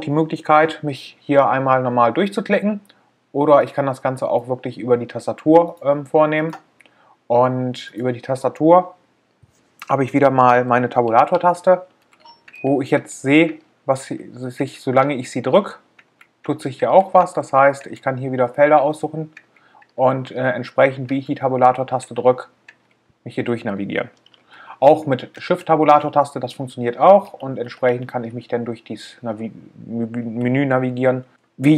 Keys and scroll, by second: 11.2 Tab, 22.4 Tab.